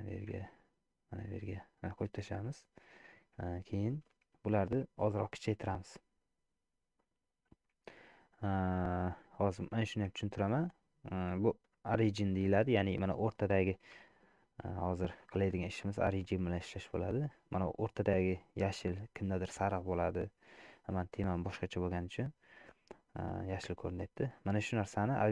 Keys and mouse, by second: 2.1 middle click, 3.6 shift+middle click, 5.6-8.6 right drag, 9.4 middle click, 10.3 shift+middle click, 10.8 middle click, 11.6 shift+middle click, 14.0 KP_Decimal, 15.5 middle click, 16.0 middle click, 16.6 click, 19.7-20.7 middle drag, 21.9 middle click, 23.7 middle click.